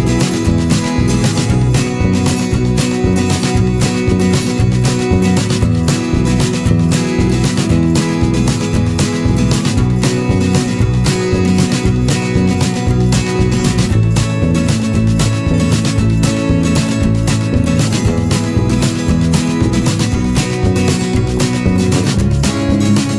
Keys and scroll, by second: 0.2 ctrl+z, 4.0 ctrl+-, 6.4 Return, 7.2 ctrl+=, 7.5 ctrl+space.